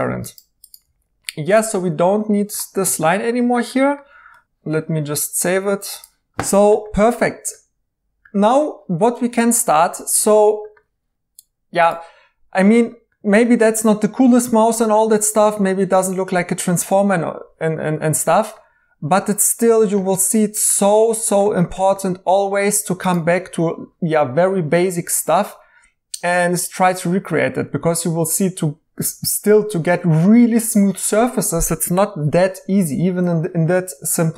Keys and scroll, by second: 0.8 2, 2.7 x, 4.4 s, 6.3 typing.